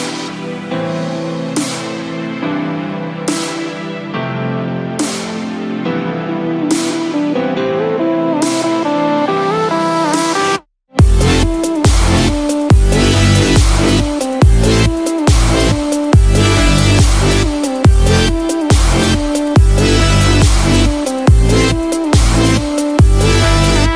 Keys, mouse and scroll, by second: 0.8 g, 4.3-4.7 scroll down 2, 4.8-5.7 scroll up 1, 5.8 middle click, 5.8 scroll up 5, 10.4 click, 13.5 click, 13.9-14.8 scroll down 3, 14.2 middle click, 14.8 scroll down 1, 15.4 scroll down 5, 15.5 middle click, 17.5 scroll up 4, 18.3 click, 18.9 click, 19.2-20.0 scroll up 3, 20.2 middle click, 21.8 click, 22.4 scroll down 1, 22.6 middle click, 23.6 middle click.